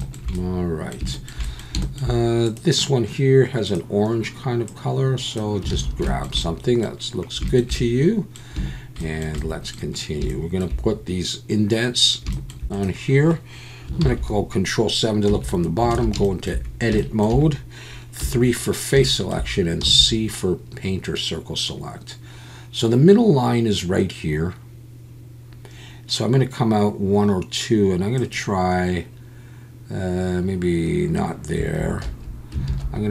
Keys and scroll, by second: 5.7 alt+a, 14.0 ctrl+KP_7, 15.3 Tab, 15.9 alt+a, 18.2 3, 19.8 c, 32.1 Escape, 32.7 alt+a.